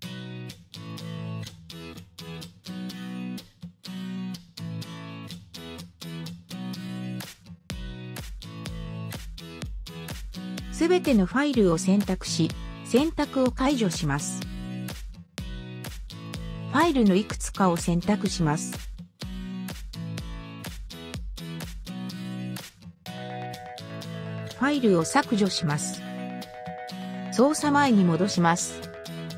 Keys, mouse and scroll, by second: 0.0-2.6 typing, 2.9 Return, 6.3 click, 6.4 typing, 7.4 F2, 7.7-8.8 typing, 11.8 ctrl+a, 14.1 F5, 18.6 click, 20.9 ctrl+click, 20.9 ctrl+F5, 25.2 Delete, 27.8 ctrl+z.